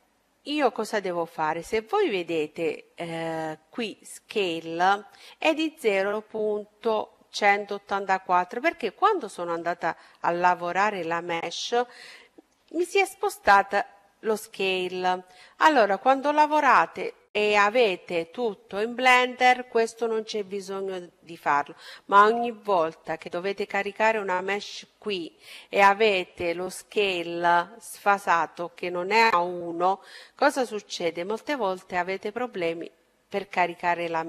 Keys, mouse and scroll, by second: 7.7-10.7 right drag, 11.7-13.3 middle drag.